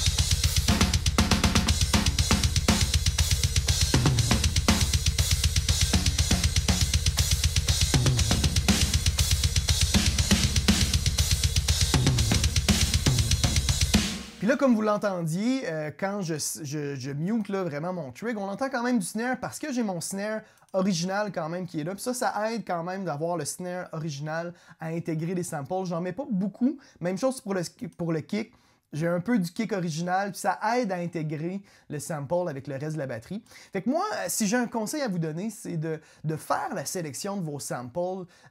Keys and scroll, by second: 14.0 space.